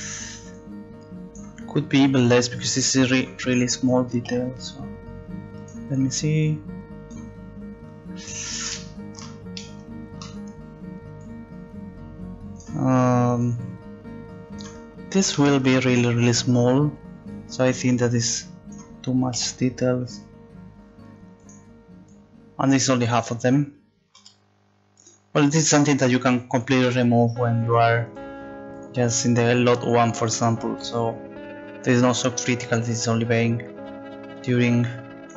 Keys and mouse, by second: 0.5 click, 2.4-4.3 drag, 4.3 s, 6.4-8.8 drag, 11.2 click, 19.4 s, 22.1 click, 22.8-24.2 drag, 24.2 s, 25.8-26.8 drag, 26.8 s, 28.7 click, 31.2 click, 33.3-35.3 drag.